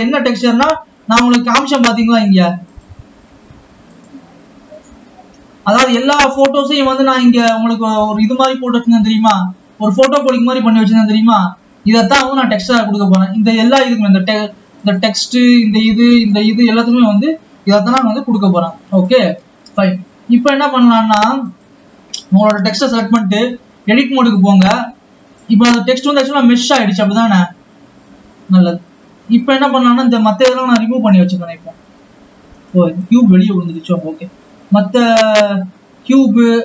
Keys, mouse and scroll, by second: 1.3 Tab, 9.9 click, 13.6 click, 15.0 click, 16.7-18.0 scroll down 3, 18.0 s, 20.2-20.6 scroll up 2, 21.7 click, 22.3-23.3 scroll up 3, 23.3 Tab, 24.6 click, 26.3 click, 31.3-33.2 drag.